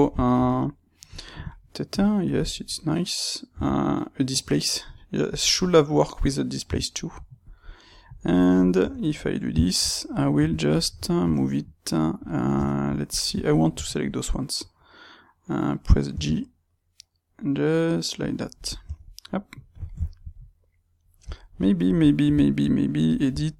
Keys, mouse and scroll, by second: 3.6 g, 4.9 click, 5.4-6.7 middle drag, 6.7 g, 7.5-12.1 middle drag, 7.5 click, 8.7 Tab, 12.1 click, 12.5 Tab, 13.0 click, 13.3 ctrl+right click, 16.0 g, 18.3 click, 18.8 Tab, 19.2-23.0 middle drag, 23.0 click, 23.2 Tab.